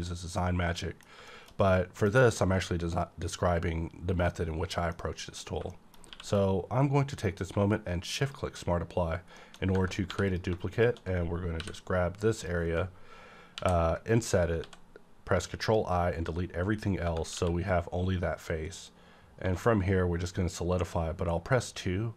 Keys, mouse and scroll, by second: 1.6-4.3 middle drag, 4.3-5.7 middle drag, 5.7 shift+middle click, 6.1 q, 8.2 shift+click, 9.4 shift+middle click, 9.6 scroll up 1, 10.1 3, 10.3 click, 11.6 i, 12.3 click, 13.5 ctrl+i, 14.6 x, 15.4 click, 17.0 Tab, 17.3 q, 18.7 click, 19.4 2.